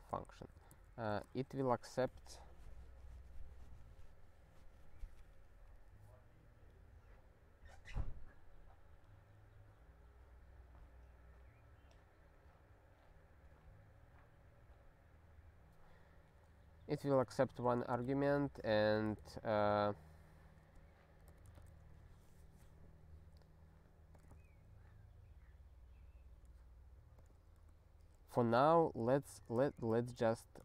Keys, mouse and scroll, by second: 0.0-1.3 typing, 17.2-21.3 typing, 17.6 ctrl+f, 19.9 alt+/, 21.7 ctrl+s, 24.1 click, 24.3 ctrl+a, 27.2 click, 27.6 ctrl+b, 28.3 ctrl+f, 28.6-29.5 typing, 29.5 alt+d, 30.2 ctrl+d.